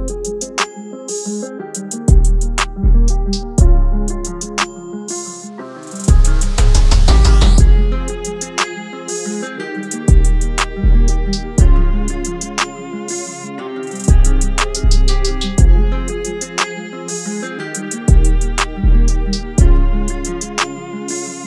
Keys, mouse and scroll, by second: 0.9 click, 5.8-15.5 drag, 18.1 Tab, 21.0 Tab.